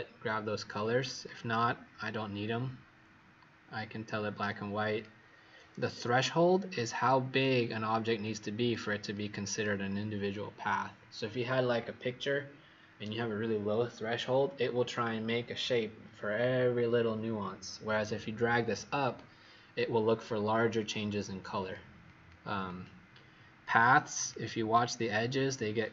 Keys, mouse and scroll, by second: 1.2 click, 22.0 click, 22.6 click, 23.8 click.